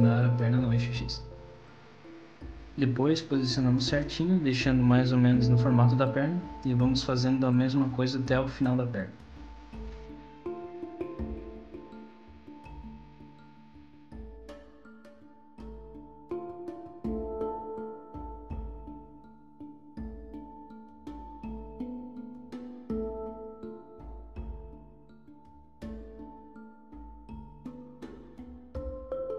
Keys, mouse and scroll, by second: 0.0 KP_3, 2.0 s, 6.5 g, 13.5 s, 16.1 click, 17.5 r, 22.6 e, 24.9 middle click, 25.5 click, 26.1 middle click, 26.3 click, 26.5 click, 26.7 middle click, 27.3 KP_3, 27.9 e.